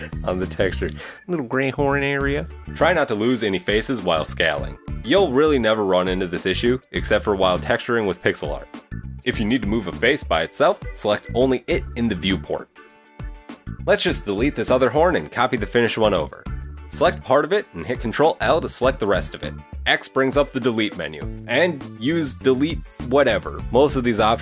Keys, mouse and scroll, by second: 0.0 right click, 0.2 shift+right click, 0.5 g, 1.0 right click, 1.2 shift+right click, 1.3 shift+right click, 1.7 shift+right click, 1.9 shift+right click, 2.1 shift+right click, 2.2 g, 2.7 right click, 2.9 shift+right click, 3.0 shift+right click, 3.2 g, 4.3 right click, 4.4-4.9 shift+right click, 4.5 shift+right click, 4.7 shift+right click, 5.3 g, 6.7 c, 7.4 g, 8.3 click, 8.6 right click, 9.6 right click, 10.1 right click, 10.8 shift+right click, 11.1 right click, 11.2 shift+right click, 11.4 shift+right click, 11.6 shift+right click, 12.5 g, 14.1 scroll down 1, 14.3 Tab, 15.0 Tab, 15.9 middle click, 17.0 right click, 18.0 ctrl+l, 19.9 x.